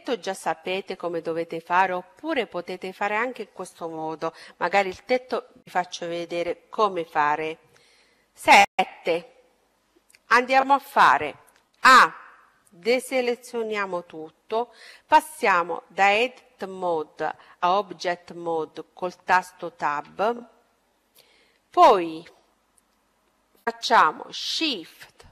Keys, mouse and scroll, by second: 8.3 KP_7, 11.6 a, 19.4 Tab.